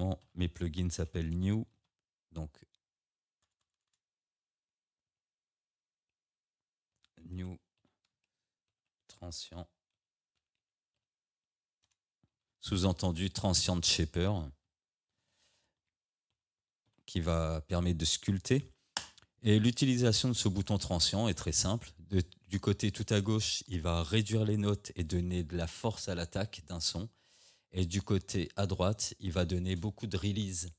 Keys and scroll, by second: 0.3 shift+n, 1.4 e, 3.5 BackSpace, 5.1 Caps_Lock, 7.0 shift+n, 7.4 e, 8.2 space, 9.1 r, 11.9 BackSpace, 12.4 n, 14.3 space, 15.5 h, 19.0 Return.